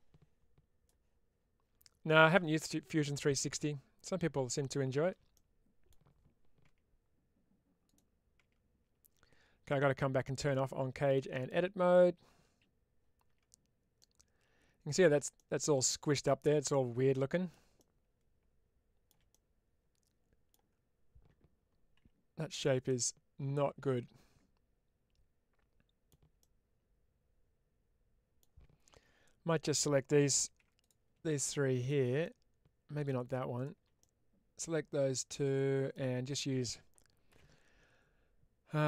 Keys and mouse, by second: 5.3 middle click, 6.5 Tab, 10.5-11.3 drag, 13.9-14.9 middle drag, 15.2 middle click, 16.6 middle click, 17.6-19.0 shift+middle drag, 19.2-20.4 middle drag, 21.9 1, 22.4 click, 22.7-26.0 middle drag, 26.3-28.3 middle drag, 30.5 3, 30.7 click, 32.1 middle click, 33.9-35.8 middle drag, 37.2 n.